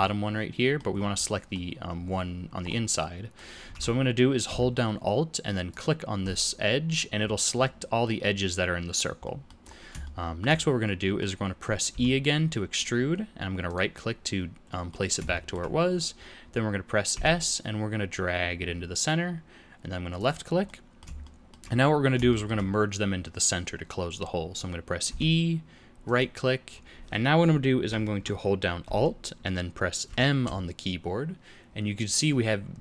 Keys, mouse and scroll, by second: 0.0 middle click, 0.9 scroll up 3, 1.2 middle click, 2.6-3.0 scroll up 2, 3.0 middle click, 3.7 alt+a, 5.7 alt+click, 7.2-7.6 scroll down 5, 7.6 middle click, 9.2 middle click, 9.6 scroll up 3, 10.0 shift+middle click, 10.8 middle click, 11.9 e, 14.6 middle click, 15.3 shift+middle click, 17.1 s, 20.6 middle click, 21.2 shift+middle click, 22.2 middle click, 25.0 e, 30.0 alt+m.